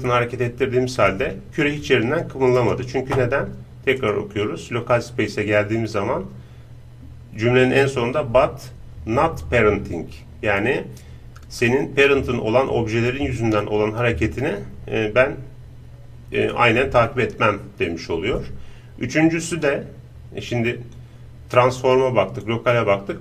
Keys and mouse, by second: 2.5-4.5 right drag, 4.0-17.3 drag.